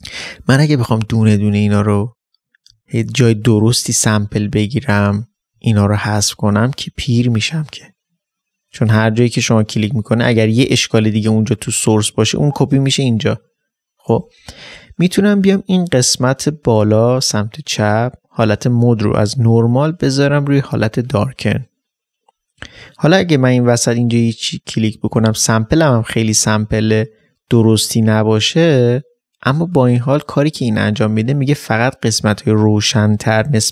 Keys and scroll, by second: 2.9 alt+space.